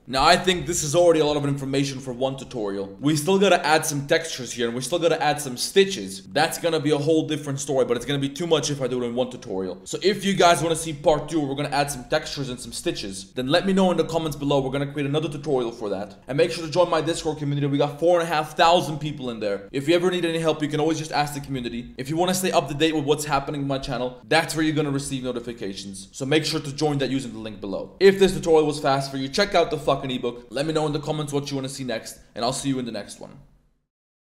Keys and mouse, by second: 2.9 middle click, 3.6 middle click, 4.7 middle drag, 5.9-6.3 middle drag, 6.5-7.6 middle drag, 10.9 click, 11.0 middle click, 13.3 middle click, 14.7 click, 14.8 middle click, 19.6 click, 21.6 click, 22.2 click, 23.0 click, 27.8 click.